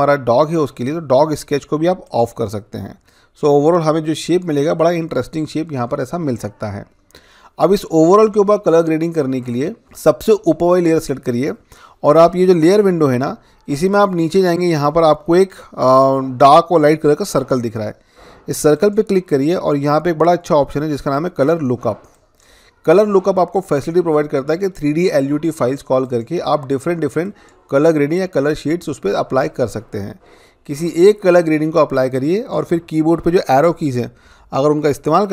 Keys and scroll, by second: 33.7 Down, 34.2 Down, 34.9 Down.